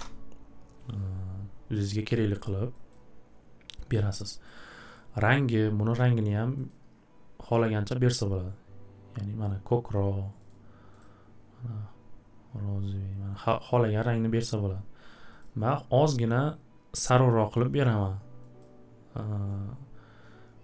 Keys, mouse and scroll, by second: 2.9 click, 3.9 click, 4.4 click, 4.9 click, 6.7 click, 10.5 click, 11.0 click, 14.5 click, 15.4 click, 18.6 click.